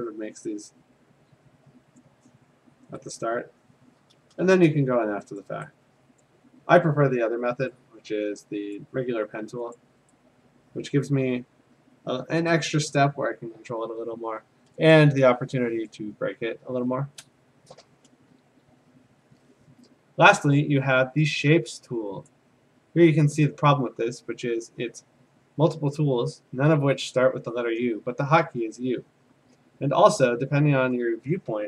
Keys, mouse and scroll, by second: 2.0 click, 3.1 click, 4.4 a, 5.4 click, 6.2 click, 8.7 click, 9.8 click, 10.9 click, 14.2 click, 14.9 alt+click, 15.9 click, 17.2 Escape, 22.3-25.4 drag.